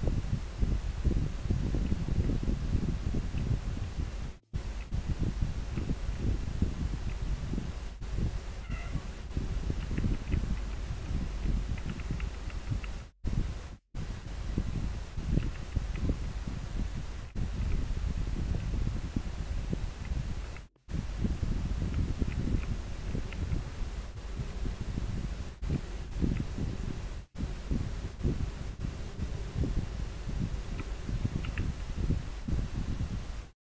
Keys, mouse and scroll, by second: 0.7 scroll up 1, 4.0 scroll up 1, 10.3 scroll down 1, 11.6 scroll up 1, 16.0 scroll down 1, 22.4 scroll up 1, 25.4 scroll down 1, 26.6 scroll up 1.